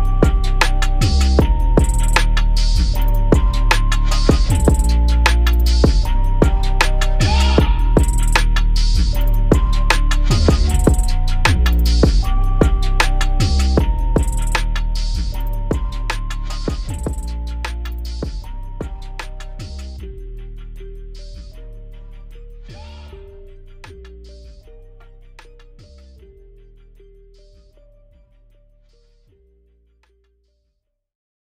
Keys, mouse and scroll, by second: 3.2 click, 4.0 click, 4.6 click, 4.9 click, 5.3 scroll down 1, 5.4 click, 5.9 shift+d, 7.0 r, 7.5 s, 8.3 click, 9.7 g, 11.2 click, 11.7 ctrl+s, 12.0-12.6 scroll down 9, 12.6 click, 13.1-13.5 scroll down 1, 13.5 click, 13.7 click, 14.7-15.0 scroll up 3, 16.0 x, 17.1 click, 17.7 x, 18.1 click, 18.4 x, 18.8 click, 19.1 x, 19.5-20.3 scroll up 7, 20.3-20.8 scroll down 9, 20.8 click, 21.2 click, 21.4 click, 21.8 click, 21.9 click, 22.2 scroll up 4, 22.3-22.7 scroll down 1, 22.7 click, 23.3 scroll down 1, 23.4 click, 23.8 Tab, 23.9 click, 24.8 shift+d, 25.4 p, 25.8 Tab, 26.0 click, 26.4 scroll down 1, 26.5-26.9 scroll up 3, 26.9 click, 27.4 scroll down 1, 27.5 click, 27.8 click, 29.1 scroll up 1, 29.3 scroll down 1, 30.7 click, 30.8 drag.